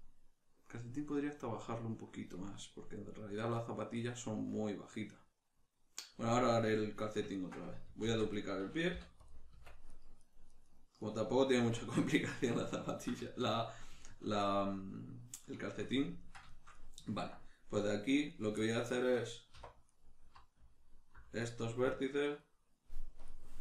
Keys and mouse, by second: 8.0 shift+d, 8.4 right click, 9.0 p, 9.9 right click, 10.2 right click, 10.5 right click, 11.0 right click, 11.6 Tab, 12.3-18.3 shift+middle drag, 18.3 right click, 18.6-19.9 ctrl+middle drag, 19.6 1, 19.9 right click, 21.4 right click, 22.0 ctrl+right click, 23.2-23.6 drag.